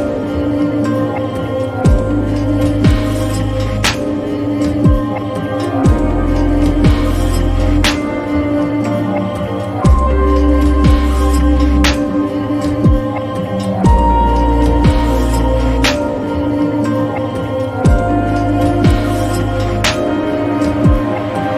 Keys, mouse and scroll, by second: 1.5 click, 5.1-7.2 drag, 7.5 click, 12.2 click, 12.7 ctrl+j, 15.2-21.5 drag.